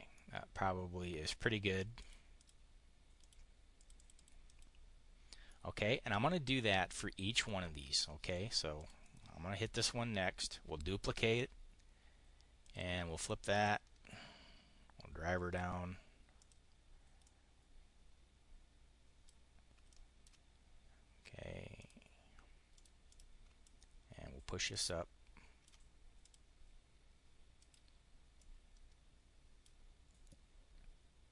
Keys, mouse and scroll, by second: 1.9 click, 2.3 click, 3.1 click, 3.7 click, 4.2 click, 5.3 click, 6.4 click, 7.3 click, 8.6 click, 10.4 click, 12.5 click, 13.5-15.5 ctrl+drag, 16.3 click, 17.1-19.3 drag, 19.7 ctrl+click, 21.7 click, 22.7 click, 23.0 click, 23.5-25.7 ctrl+drag, 26.1 click, 27.5 click, 28.2-29.4 drag, 30.0 click.